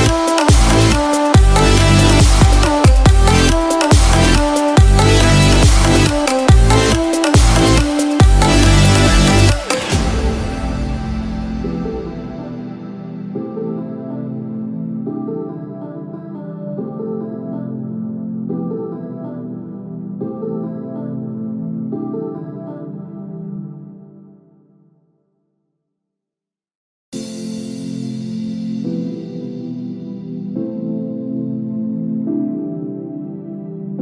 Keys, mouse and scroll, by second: 15.8-17.1 scroll down 14, 17.0 middle click, 17.6-18.1 scroll up 7, 18.5 scroll up 1, 18.6 middle click, 19.8-20.2 scroll down 3, 20.2 middle click, 20.8-21.5 scroll down 2, 21.1 shift+middle click, 21.5 middle click, 22.2-24.4 scroll up 10, 22.8 shift+middle click, 24.4 shift+middle click, 24.9 middle click, 25.5-25.9 scroll up 3, 25.8 shift+middle click, 28.1-29.1 scroll down 16, 29.8 middle click, 29.8-30.3 scroll down 2, 30.3 shift+middle click, 30.7 middle click, 31.5-32.0 scroll up 1, 32.0 shift+middle click, 32.0-33.4 scroll up 3.